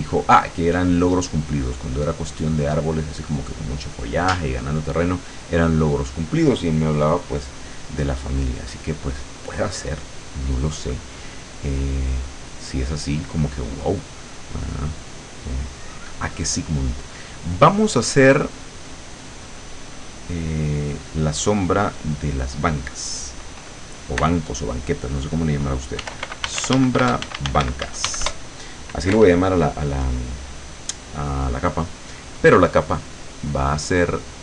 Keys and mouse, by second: 1.4-2.6 drag, 14.7 click, 16.3 click, 19.6 right click, 21.5 click, 26.1-28.1 typing, 28.3 Return, 33.1-34.4 drag.